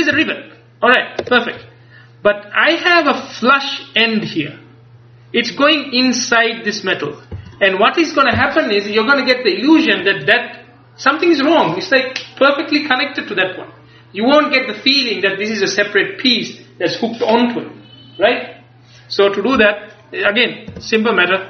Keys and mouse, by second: 0.2-1.4 ctrl+KP_Add, 6.1-7.4 drag, 7.4 Tab, 20.8 Tab.